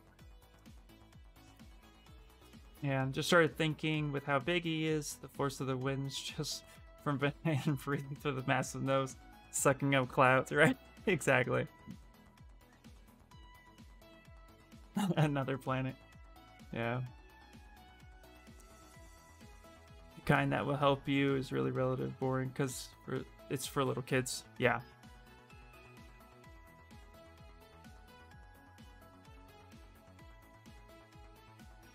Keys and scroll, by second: 26.0 s, 27.6 s.